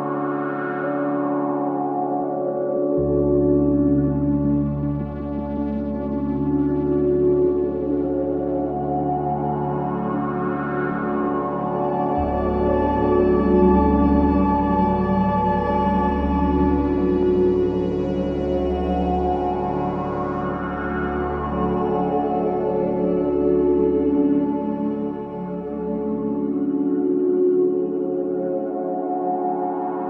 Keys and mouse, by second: 0.2 space, 1.3 ctrl+z, 1.7 ctrl+z, 3.7-4.6 drag, 4.6 space, 5.6 space, 7.2-10.6 drag, 9.5 typing, 11.4-12.9 drag, 12.9 g, 13.3 x, 13.8-15.3 drag, 14.8-15.1 typing, 16.2 typing, 17.2-18.7 drag, 18.7-19.2 typing, 19.9-21.2 drag, 20.7 typing, 22.6-23.3 typing, 23.0 click, 25.0-27.7 typing, 25.4 click, 28.4 ctrl+s, 29.2-30.0 drag, 29.7 space.